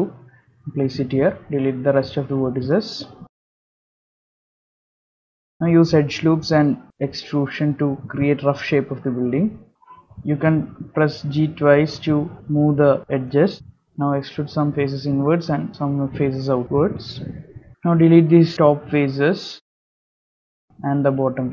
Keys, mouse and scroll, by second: 3.1 1, 3.7 click, 4.2 x, 4.9 ctrl+r, 4.9 shift+middle click, 4.9 scroll up 2, 8.1 ctrl+r, 10.8 ctrl+r, 11.1 ctrl+r, 11.2 ctrl+r, 11.3 ctrl+r, 11.4 ctrl+r, 11.6 ctrl+r, 12.0 g, 12.5 scroll down 3, 12.6 middle click, 12.6 scroll up 4, 12.6 3, 12.6 click, 12.8 click, 12.9 click, 12.9 click, 13.0 ctrl+click, 13.1 middle click, 13.1 shift+middle click, 13.5 e, 13.7 click, 14.0 click, 14.2 e, 14.3 middle click, 16.8 shift+middle click, 17.0 shift+middle click, 17.6 middle click, 17.8 3, 18.3 click, 19.1 shift+click, 20.3 click, 20.5 x, 21.4 middle click.